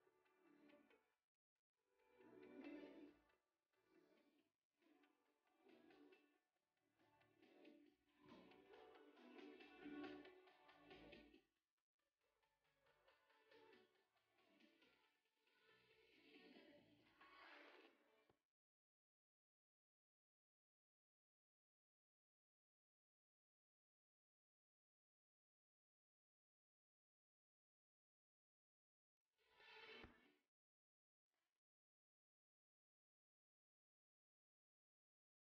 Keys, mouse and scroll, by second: 0.7 a, 1.6 ctrl+r, 4.7 g, 6.1 a, 7.6 e, 9.3 g, 13.2-14.4 scroll down 2, 15.4-17.8 shift+middle drag, 17.8 ctrl+r, 20.5 g, 23.6 space, 26.9-29.4 scroll up 1, 29.4-30.5 scroll up 1, 30.5 ctrl+b, 34.5-35.5 shift+middle drag.